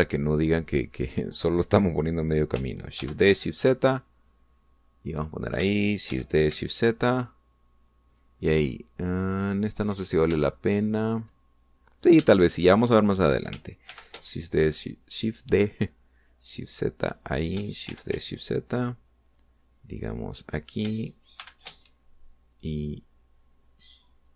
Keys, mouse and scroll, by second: 0.2 right click, 3.9 shift+d, 4.1 shift+z, 6.0 click, 7.0 shift+d, 7.4 shift+z, 9.0 click, 10.9 scroll up 1, 11.3 shift+middle click, 12.9 scroll down 1, 13.1 shift+middle click, 13.3 shift+middle click, 14.8 shift+d, 15.1 shift+z, 17.9 click, 18.8 shift+d, 19.1 shift+z, 21.3 click, 22.3 shift+d, 22.6 shift+z.